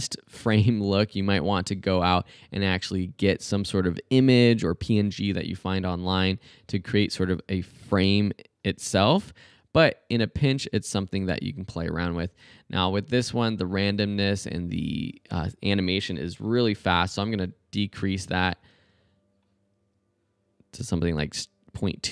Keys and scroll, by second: 0.5 space, 12.1 space, 16.5-17.4 typing, 18.7 space.